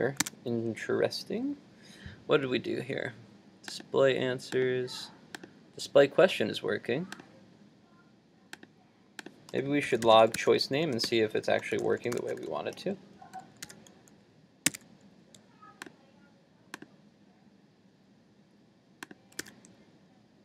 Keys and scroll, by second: 0.2 super+Tab, 13.7 super+s, 14.7 super+s, 14.8 super+Tab, 19.4 super+r.